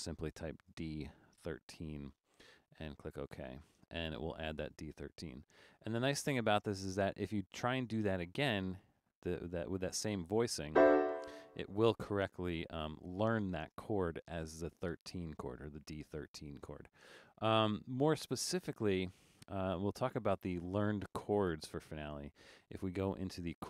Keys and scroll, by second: 0.6-2.1 typing.